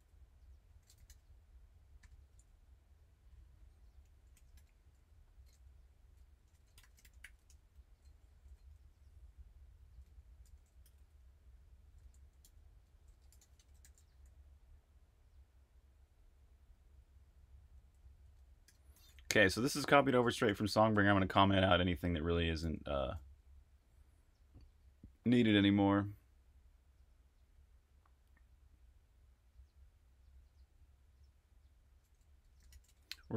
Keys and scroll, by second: 0.0-1.9 typing, 3.8-7.5 typing, 8.8-14.6 typing, 17.7-21.1 typing, 22.6-23.5 typing, 32.3-33.3 typing.